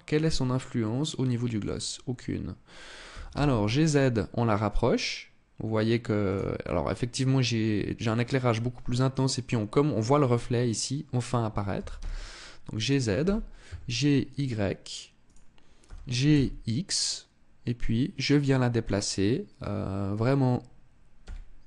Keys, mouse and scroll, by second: 1.0 click, 1.4-1.8 scroll up 2, 2.6 g, 5.9 click, 11.3 g, 12.4 click, 12.8 g, 14.9 click, 15.4 g, 18.6 click, 20.8 g.